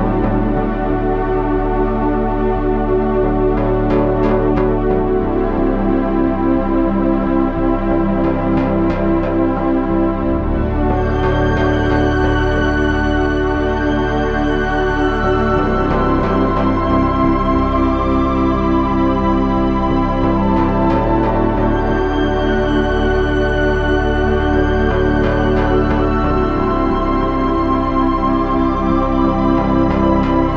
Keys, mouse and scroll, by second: 7.1 e, 14.1 e, 17.4 e, 20.2 ctrl+z, 22.1 e, 24.2 e, 27.7 e.